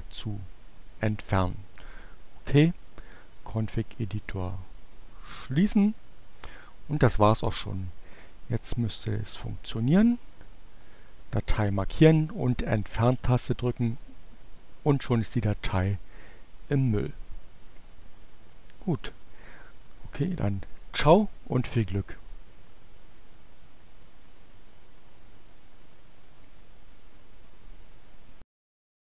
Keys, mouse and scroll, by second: 0.0 click, 2.8-4.1 drag, 4.5 click, 9.5-10.5 drag, 11.6 Delete.